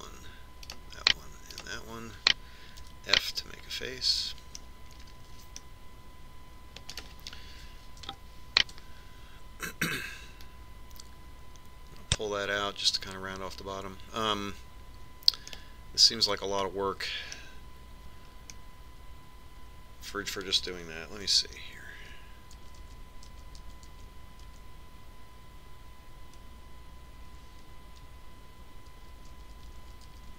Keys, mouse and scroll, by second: 1.0-4.8 right drag, 4.4 f, 4.9 right click, 6.2-8.2 middle drag, 8.5-10.5 right drag, 12.0 click, 17.1-19.0 middle drag, 20.2-22.1 middle drag, 23.1-23.8 ctrl+z, 24.5 ctrl+z, 25.0 ctrl+z, 25.3 ctrl+z, 25.6 ctrl+z, 26.1 ctrl+z.